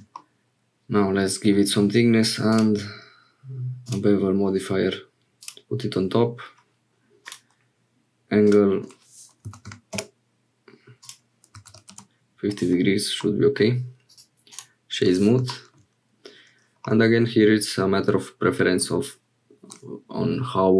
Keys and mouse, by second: 0.0 shift+click, 0.1-1.6 drag, 2.6-3.9 drag, 5.4 click, 7.2 click, 8.5-12.5 drag, 13.2 middle click, 16.9-18.9 drag.